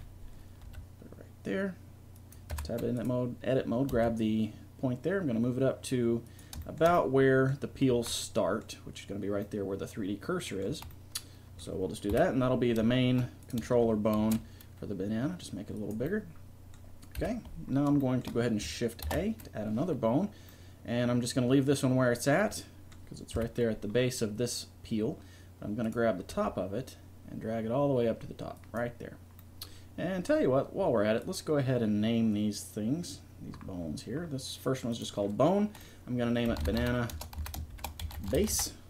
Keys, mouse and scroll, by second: 0.6 g, 2.5 Tab, 3.0-4.8 right drag, 3.9 g, 7.0 middle click, 7.9 z, 10.7 z, 12.1 KP_1, 14.2 ctrl+alt+s, 17.2 KP_1, 19.1 shift+a, 21.0-22.2 middle drag, 23.4 KP_1, 25.9 right click, 26.4 g, 27.8-29.5 drag, 31.2 right click, 31.5-34.2 drag, 34.9-36.7 middle drag.